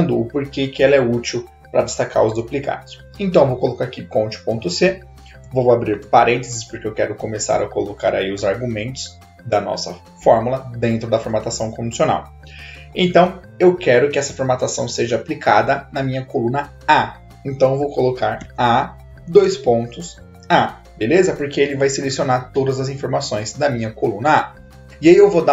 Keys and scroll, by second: 5.8 shift+9, 18.4 a, 19.4 shift+/, 20.2 a.